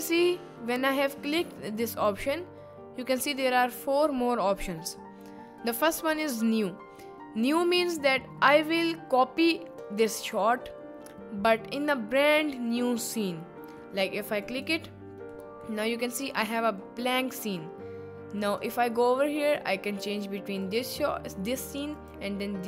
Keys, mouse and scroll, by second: 2.2-14.8 drag, 15.3-15.7 middle drag, 16.1 middle click.